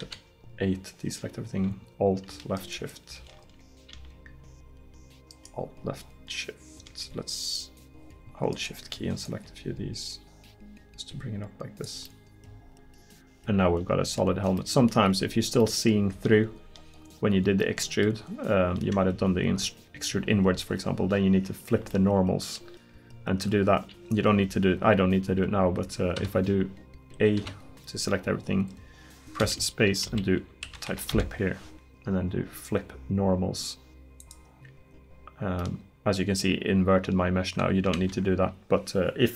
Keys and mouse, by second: 0.1 a, 9.3 middle click, 26.2 a, 27.4 a, 29.5 space, 35.7 middle click, 38.0 ctrl+z.